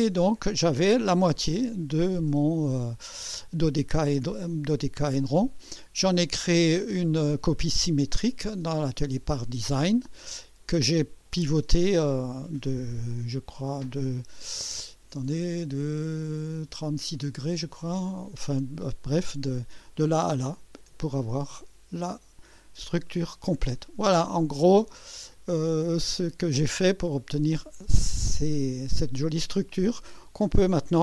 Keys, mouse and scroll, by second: 1.8-3.1 drag, 4.3-5.3 drag, 20.9-24.4 drag, 24.6 scroll up 1, 25.1 right click, 26.1 scroll up 1, 26.9 right click, 27.7-30.0 drag, 30.3 click.